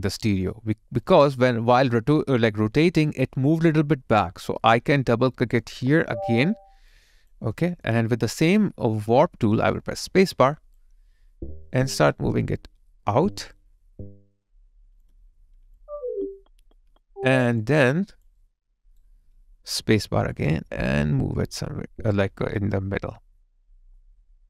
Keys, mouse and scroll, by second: 0.8 alt+right click, 1.1 alt+middle click, 5.8 double click, 6.9 alt+click, 7.5 alt+middle click, 10.1 space, 15.9 alt+click, 18.4 alt+right click, 19.8 space.